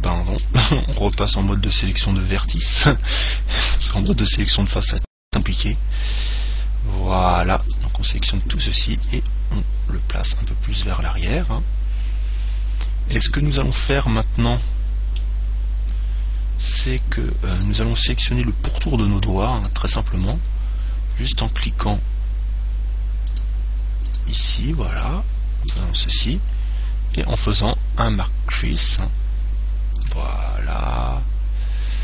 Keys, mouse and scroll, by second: 1.4 ctrl+Tab, 4.2 c, 7.9 right click, 9.2 click, 14.1-17.8 middle drag, 17.8 right click, 19.8 right click, 23.5-26.8 right drag, 27.6 click.